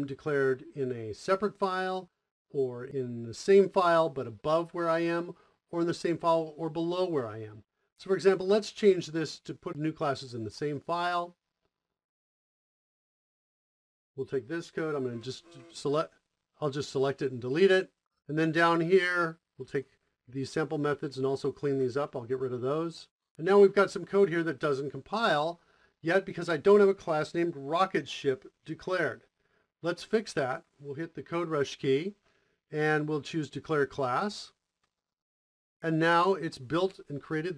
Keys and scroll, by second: 10.4 o, 14.7 KP_Add, 17.0 Delete, 21.9 Delete, 31.3 KP_0, 32.6 Down, 34.9 Return.